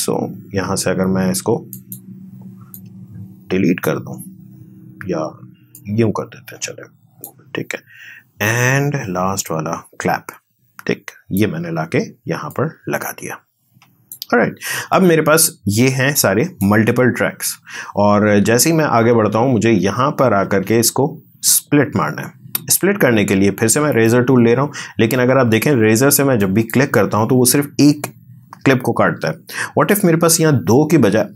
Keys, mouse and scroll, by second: 1.7-5.7 drag, 5.7-9.4 drag, 9.4-16.8 drag, 16.8 space, 23.9 click, 26.4 click.